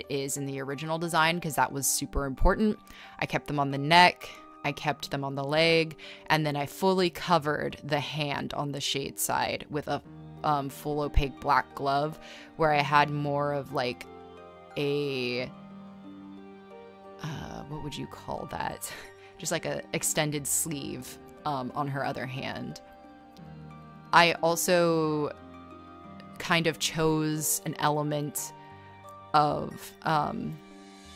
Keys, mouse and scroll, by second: 2.0 space, 2.1 e, 9.5 ctrl+z, 20.1 ctrl+z, 21.7 scroll, 22.3 scroll, 22.5 space, 24.6 scroll, 25.6 z, 26.0 space, 26.7 z, 27.1 space, 30.7 space.